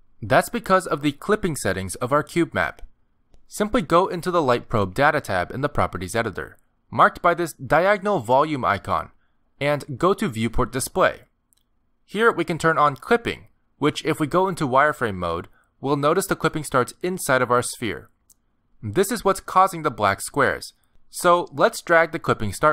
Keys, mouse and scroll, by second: 2.2 scroll down 2, 2.5 middle click, 3.3 shift+middle click, 3.9 middle click, 9.7 click, 11.5 click, 14.2 click, 15.6 z, 16.7 middle click, 17.9 scroll up 4, 19.2 scroll down 1, 19.6 middle click, 22.3 click.